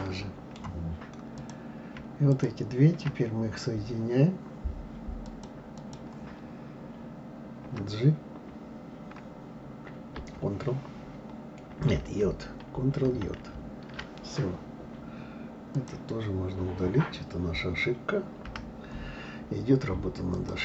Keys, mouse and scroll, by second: 1.3 click, 2.3 shift+click, 5.2 click, 12.0 ctrl+j, 13.0 ctrl+j, 13.4 ctrl+j, 15.8 click, 18.5 Delete, 20.3 click.